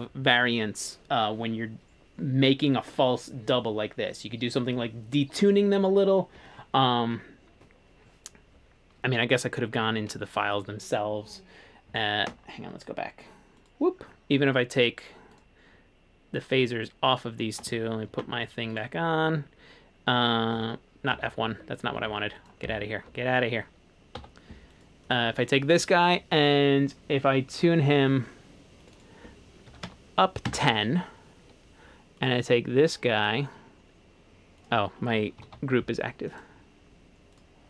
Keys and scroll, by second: 18.2 alt+2, 20.6 F1, 21.2 F1, 21.5 Escape, 22.1 Escape, 23.2 Escape, 24.2 1, 29.5-30.4 typing, 30.6 Return, 31.5 ⟲, 35.5 alt+2.